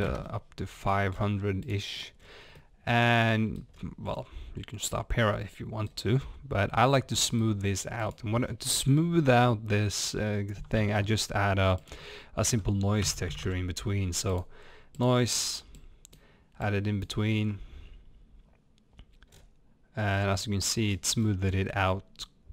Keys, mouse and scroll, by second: 0.0 click, 0.0 KP_0, 0.1 KP_Enter, 1.1 scroll down 1, 1.7-2.2 drag, 2.2 scroll down 1, 2.6-15.0 middle drag, 3.7 scroll up 1, 5.9 scroll up 1, 15.2 click, 16.6 click, 19.3 scroll up 1, 20.7 middle drag, 20.7 scroll up 1, 20.9 scroll down 2, 21.1 middle click, 21.5 scroll up 1.